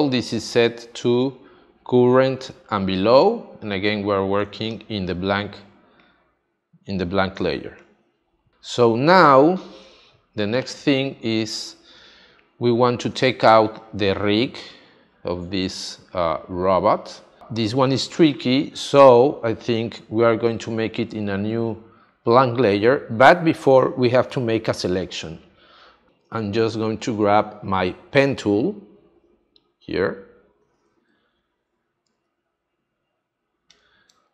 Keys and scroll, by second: 4.4 space, 7.3 space, 8.7 space, 12.0 space, 31.0 space.